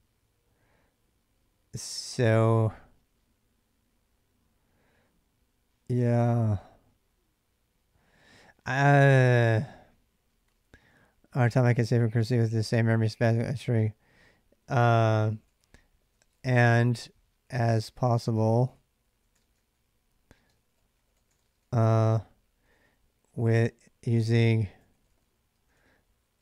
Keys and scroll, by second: 0.0-2.1 typing, 8.8 j, 10.0-26.4 typing.